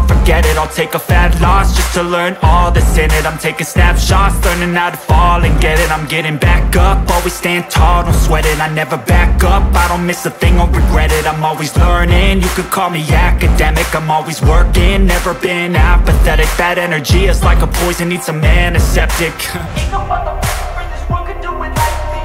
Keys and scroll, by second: 1.3 ctrl+space, 2.2 ctrl+space.